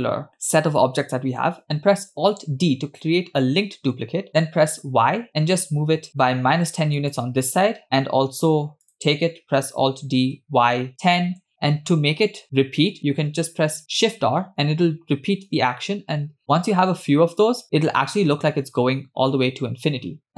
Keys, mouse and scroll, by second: 2.8 alt+d, 8.9 click, 10.1 alt+d, 14.1 shift+r, 15.8 shift+r, 16.6-17.4 scroll down 1, 17.4-18.2 scroll down 2, 20.3 KP_0.